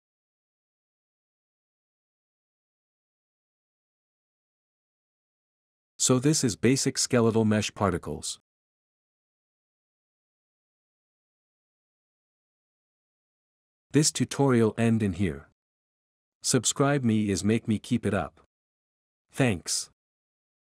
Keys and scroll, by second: 8.5-10.9 typing, 12.2 a, 12.2 s, 12.6 d, 17.4 F11, 18.6-20.2 typing.